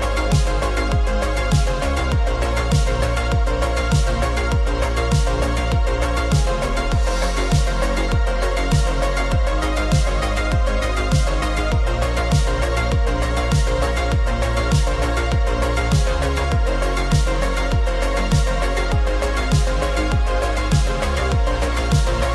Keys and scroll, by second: 6.2 Delete, 12.0 super+0.